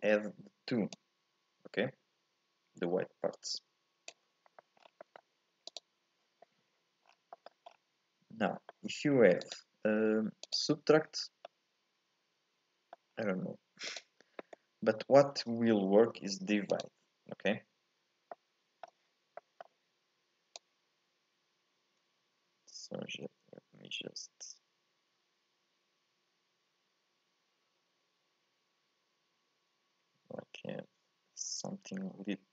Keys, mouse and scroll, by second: 0.9-3.9 drag, 4.5 middle click, 4.8 scroll up 3, 5.0 middle click, 5.7-7.1 drag, 7.1 scroll down 1, 7.3 middle click, 7.7-8.5 scroll up 3, 8.5 middle click, 9.4-11.4 drag, 11.4-13.1 middle drag, 13.1-13.8 scroll up 1, 13.8-16.9 drag, 18.3 middle click, 19.1 scroll up 1, 19.4-20.5 middle drag, 20.5-23.6 drag.